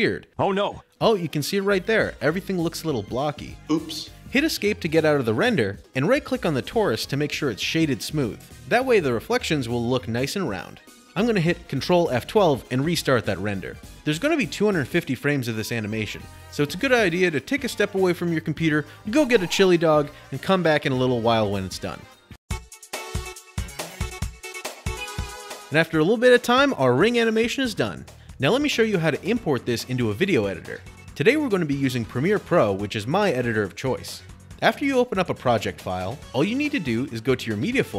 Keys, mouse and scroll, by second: 4.1 Escape, 4.1 click, 6.7 click, 8.2 click, 12.8 ctrl+F12, 31.1-33.0 drag, 35.3 click.